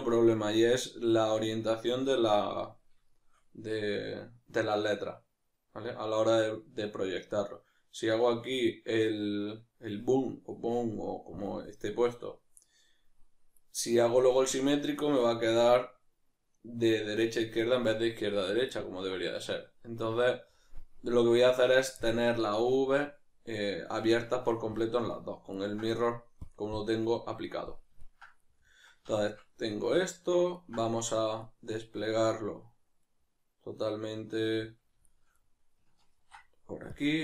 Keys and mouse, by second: 26.4-27.7 drag, 27.7-37.2 middle drag, 36.2 ctrl+e.